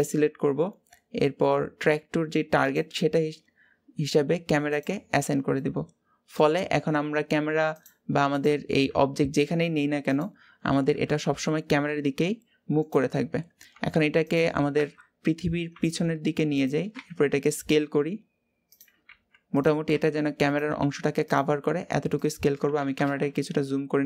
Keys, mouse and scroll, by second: 3.5 click, 5.3-7.6 middle drag, 7.6 click, 8.2 click, 8.7 g, 10.6 KP_7, 11.3-11.7 scroll down 2, 11.7 g, 13.0-13.5 scroll up 2, 13.5 g, 14.5 KP_0, 15.5 g.